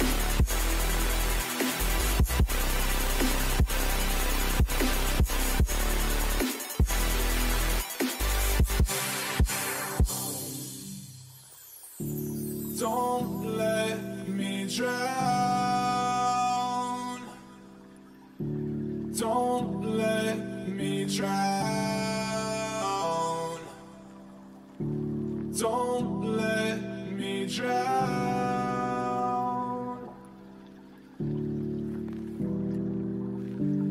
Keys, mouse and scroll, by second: 0.2-2.4 middle drag, 8.0-10.9 middle drag, 11.4-13.5 middle drag, 19.4-22.9 middle drag, 23.7-28.2 middle drag, 30.6-31.8 middle drag, 31.8 a, 33.1-33.9 drag.